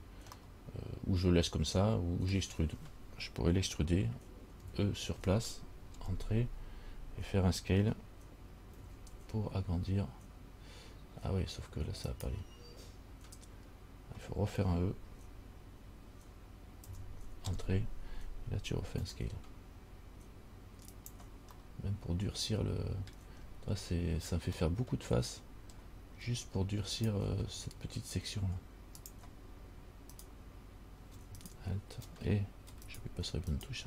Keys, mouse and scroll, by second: 0.6 middle click, 4.8 e, 9.0 s, 17.1 e, 19.2 s, 21.8 middle click, 23.6-24.7 scroll up 2, 24.8 middle click, 26.0-26.5 scroll up 2, 27.2 alt+right click, 29.2 click, 30.4 right click, 31.3 space, 33.7 alt+right click.